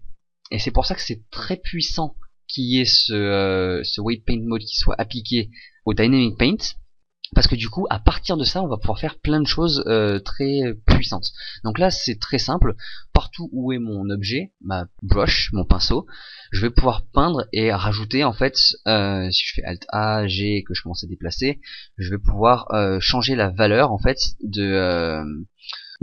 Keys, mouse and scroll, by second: 14.9 right click, 17.1 click, 19.5 alt+a, 20.1 g.